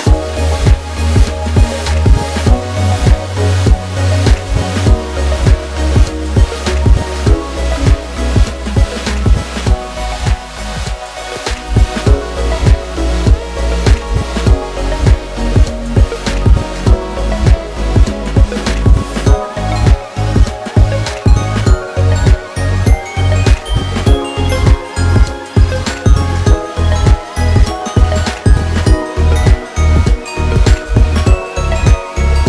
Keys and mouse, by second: 0.6 ctrl+r, 6.2 alt+3, 6.3 alt+z, 7.4-9.3 drag, 10.1 middle click, 11.5 KP_1, 12.6 shift+middle click, 13.9 middle click, 14.8 middle click, 15.6 alt+e, 21.3-22.5 middle drag, 23.1 shift+click, 24.7 alt+z, 25.7 i.